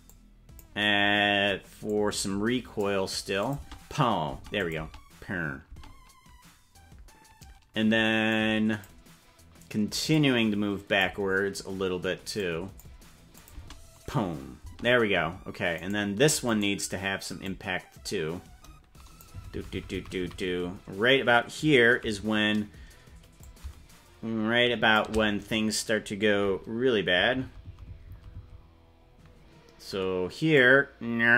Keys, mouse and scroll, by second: 0.0 click, 1.8-2.8 drag, 3.4 click, 3.6 space, 4.4 space, 4.6 click, 4.8 space, 5.8 space, 8.3 click, 10.1 click, 12.3 click, 13.3 click, 13.5 space, 14.7 space, 15.8 right click, 16.5 right click, 17.4-19.2 drag, 19.4 Right, 19.6 Right, 19.8 Right, 20.0 Right, 20.2 Right, 23.4-24.9 shift+drag, 27.1 Right, 27.4 Right, 27.6 Right, 27.8 Right, 28.1 Right, 28.4 Right, 30.5-31.3 drag.